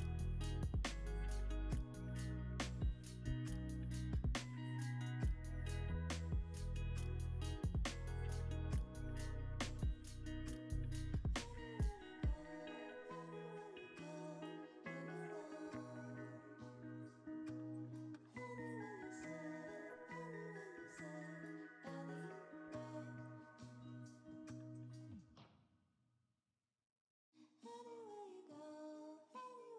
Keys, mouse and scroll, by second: 1.3 a, 3.6 ctrl+z, 4.1 ctrl+z, 4.4 ctrl+z, 4.7 ctrl+z, 5.2 ctrl+z, 5.7 ctrl+z, 6.3 ctrl+z, 6.5 ctrl+z, 6.7 ctrl+z, 6.9 ctrl+z, 7.4 ctrl+z, 7.7 ctrl+z, 8.0 ctrl+z, 8.5 ctrl+z, 9.3 ctrl+z, 9.8 ctrl+z, 10.2 ctrl+z, 10.5 ctrl+z, 10.8 ctrl+z, 11.2 ctrl+z, 11.6 ctrl+z, 13.4 e, 15.2 ctrl+z, 15.7 e, 18.6 ctrl+c, 19.5 Escape, 20.6 Tab, 21.7 Tab, 22.1 a, 22.4 e, 25.2 ctrl+right click, 25.5 ctrl+v, 26.0 Return, 27.6 Tab, 28.6 Tab, 29.0 a, 29.6 e.